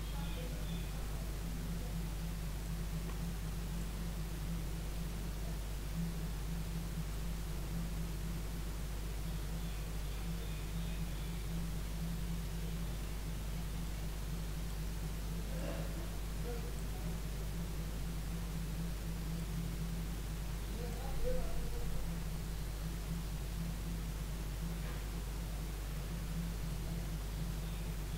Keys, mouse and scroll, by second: 3.8-7.1 drag, 15.6-17.2 drag, 17.2-19.4 middle drag, 19.4-21.3 drag, 21.3-28.1 middle drag.